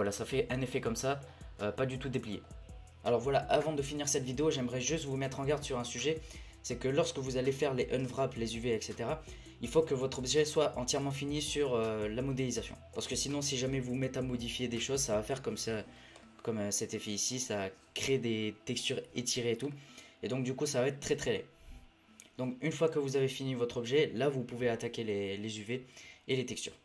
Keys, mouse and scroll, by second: 0.0-0.6 middle drag, 0.6-0.9 scroll down 3, 0.9-1.3 scroll up 1, 1.3 scroll down 2, 1.4-2.2 scroll up 16, 2.2 scroll down 1, 2.5 scroll up 1, 15.9 scroll up 1, 16.2-17.4 middle drag, 17.4-19.1 scroll up 1, 19.1-19.4 scroll up 2, 19.4-19.7 scroll down 4, 19.7 middle click, 20.1-23.1 scroll up 1.